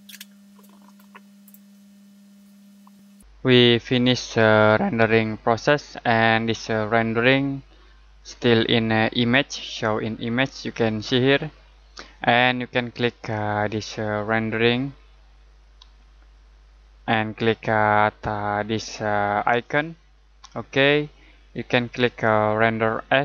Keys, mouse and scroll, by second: 14.4 click, 19.5 click.